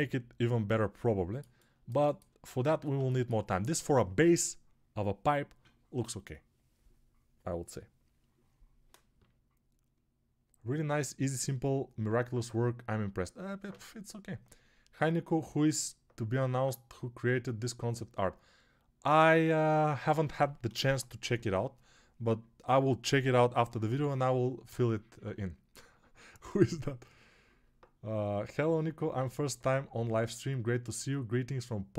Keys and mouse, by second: 2.5 alt+q.